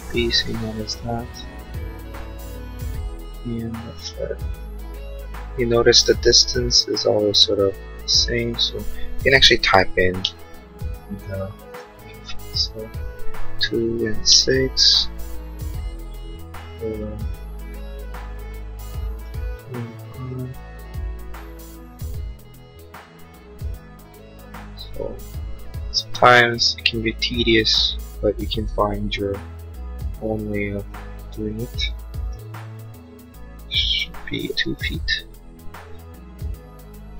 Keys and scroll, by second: 9.0-10.4 typing, 13.3-14.6 typing, 34.4 2, 34.8 Return.